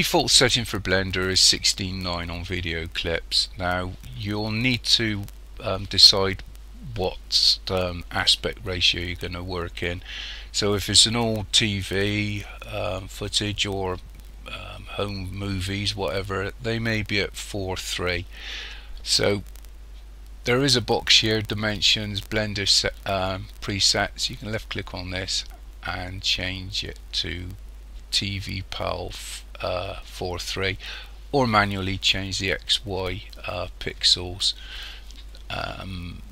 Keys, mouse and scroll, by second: 24.4 click.